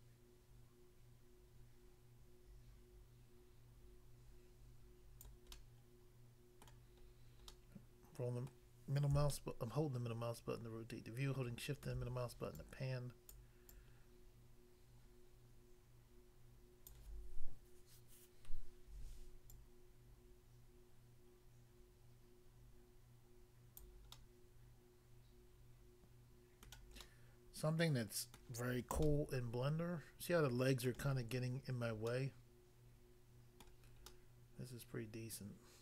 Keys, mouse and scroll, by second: 5.2 click, 5.6 middle click, 6.7 middle click, 7.0-7.5 scroll down 1, 7.5 middle click, 8.4 middle click, 9.4 shift+middle click, 12.6 click, 13.4 click, 13.7 click, 16.9 click, 19.6 click, 23.8 click, 24.2 middle click, 26.7 middle click, 27.0 middle click, 28.4 middle click, 29.0 shift+middle click, 33.7 middle click, 34.1 middle click.